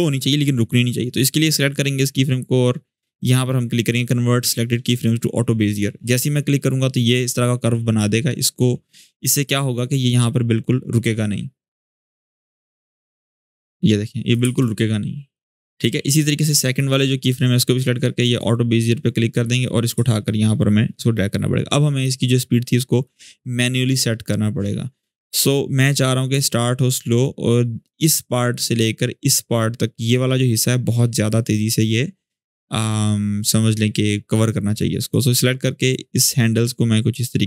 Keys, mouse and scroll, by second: 0.9-1.5 drag, 5.4 click, 7.7-9.6 drag, 14.2 space, 15.1-15.7 drag, 22.8-24.0 drag, 32.6-34.2 drag.